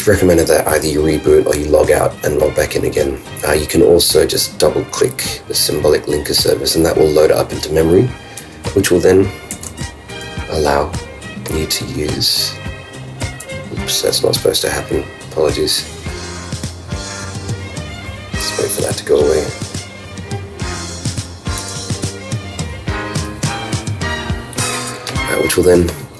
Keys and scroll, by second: 9.5 super+w, 21.6 super+q.